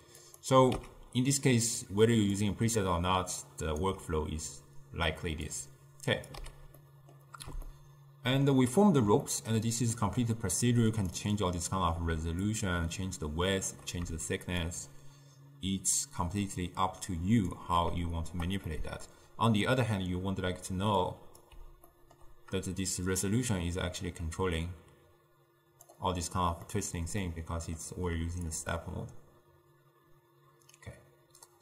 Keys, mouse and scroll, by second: 0.3 click, 0.8 x, 1.9 click, 3.5 ctrl+right click, 5.6-6.5 drag, 6.5 x, 6.9-11.0 middle drag, 11.0-12.2 drag, 12.5-17.7 shift+drag, 18.7-21.1 middle drag, 21.1 click, 22.0-23.1 ctrl+middle drag, 23.1-26.1 drag, 26.7-28.2 middle drag, 28.6-31.6 shift+drag.